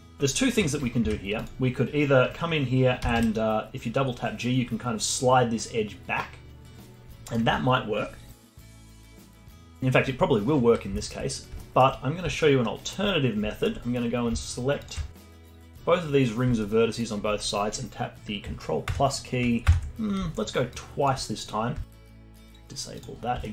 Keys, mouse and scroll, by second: 0.3 alt+middle click, 1.0 Tab, 3.0 g, 8.6-9.3 scroll down 3, 9.3-13.1 alt+middle drag, 13.1-13.5 scroll up 1, 13.5 alt+middle click, 13.8-14.6 scroll up 1, 14.6 scroll up 1, 14.8 alt+shift+click, 15.2 1, 15.5-16.1 scroll down 1, 16.3-16.6 scroll down 1, 16.6-18.9 alt+middle drag, 18.9 ctrl+KP_Add, 19.7 ctrl+KP_Add, 20.7-21.8 alt+drag, 21.8-23.5 alt+middle drag.